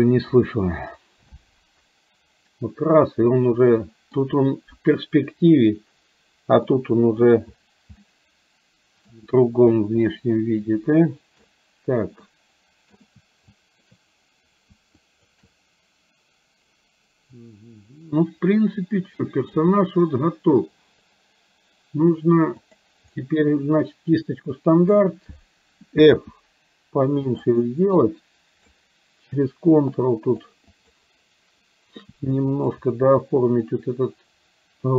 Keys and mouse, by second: 1.5-4.2 middle drag, 4.9 KP_1, 6.7 middle click, 8.0-9.1 middle drag, 10.1-11.5 shift+drag, 12.4 middle click, 13.6 shift+click, 15.0 shift+click, 18.0-19.6 middle drag, 22.7 click, 24.5 middle click, 26.2 f, 28.0 click, 30.0 ctrl+click, 30.9 ctrl+click, 32.4 middle click, 33.2-34.9 ctrl+drag.